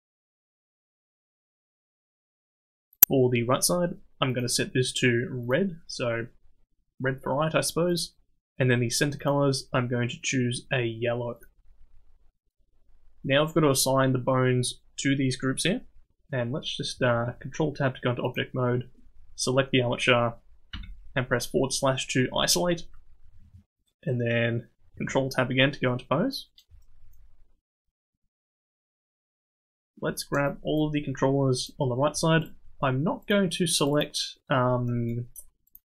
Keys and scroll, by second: 17.1 ctrl+Tab, 20.7 /, 25.0 ctrl+Tab.